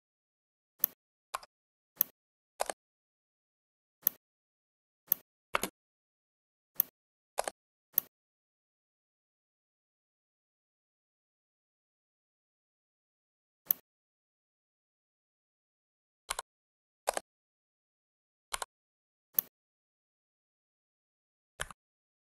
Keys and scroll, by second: 1.3 Escape, 5.5 space, 21.5 Up.